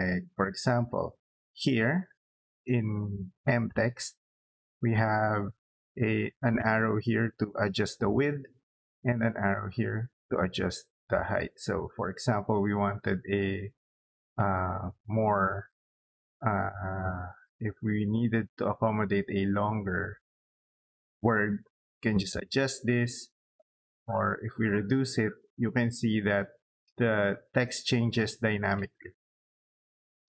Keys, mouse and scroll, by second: 0.2 middle click, 0.7 click, 0.9 click, 1.4 scroll up 2, 1.7 middle click, 2.2 scroll down 2, 2.7 middle click, 7.7 middle click, 10.2 scroll down 2, 10.3 middle click, 10.9 scroll down 2, 11.3 scroll up 2, 23.1 click.